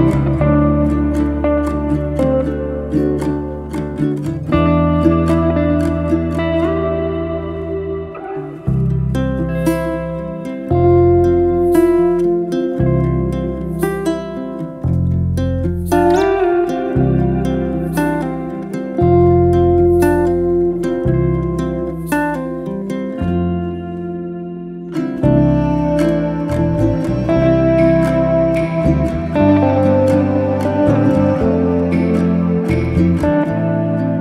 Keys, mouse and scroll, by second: 0.1-4.1 ctrl+right drag, 4.1 shift+click, 4.8 f, 5.8 click, 6.5 click, 6.9 click, 7.3 drag, 8.3 ctrl+right drag, 9.0 ctrl+right drag, 11.1 ctrl+right click, 11.7 shift+click, 12.6 f, 12.8 click, 16.3 ctrl+right drag, 16.9-18.6 ctrl+right drag, 18.6 shift+click, 19.4 f, 19.6 drag, 21.0-21.9 ctrl+right drag, 22.1 ctrl+right click, 22.9 ctrl+right drag, 23.4 shift+click, 24.0 f, 24.2 click, 25.2 ctrl+right drag, 25.7-27.2 ctrl+right drag, 27.2 shift+drag, 27.7 f, 27.9 click, 28.9 ctrl+right drag, 29.4 ctrl+right click, 30.2 shift+click, 30.7 f, 31.1 drag, 32.1-32.5 ctrl+right drag, 32.7-33.7 ctrl+right drag, 33.7 shift+click.